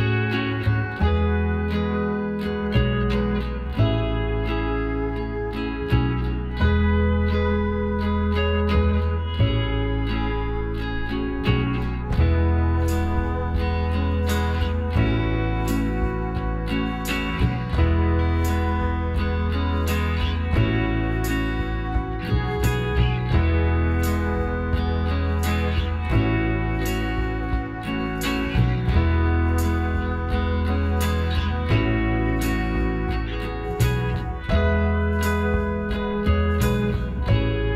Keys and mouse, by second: 0.0-1.8 middle drag, 1.8-3.8 drag, 2.9-4.7 right drag, 4.4 click, 4.7-6.7 middle drag, 6.7-8.4 right drag, 8.2 ctrl+z, 9.0-14.9 right drag, 14.0 w, 18.5-20.0 drag, 20.3-22.4 right drag, 22.0 s, 25.0-27.8 right drag, 27.1 s, 30.2 s, 31.6-33.2 middle drag, 33.2-35.1 drag, 34.3 s, 37.3-37.7 drag.